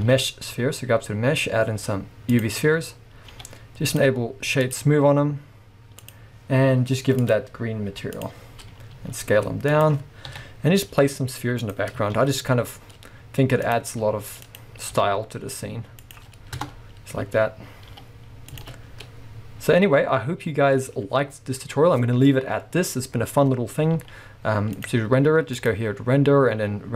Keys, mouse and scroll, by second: 0.1 shift+a, 3.4 g, 4.0 click, 4.7-9.9 drag, 8.9 scroll up 1, 9.0 s, 10.3 KP_7, 11.0 g, 11.7 click, 12.3 shift+d, 13.8 click, 14.0 s, 14.7 click, 15.0 g, 16.2 click, 16.6 KP_0, 18.0 g, 18.8 a, 20.0-21.7 scroll up 1, 24.1 z, 25.5-26.9 drag.